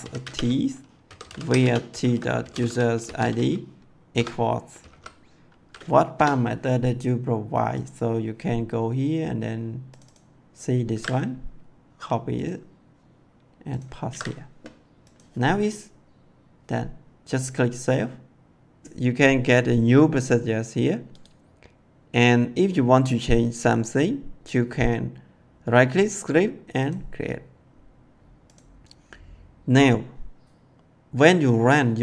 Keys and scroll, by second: 0.0-4.8 typing, 6.1 BackSpace, 10.9 ctrl+c, 14.0 ctrl+v.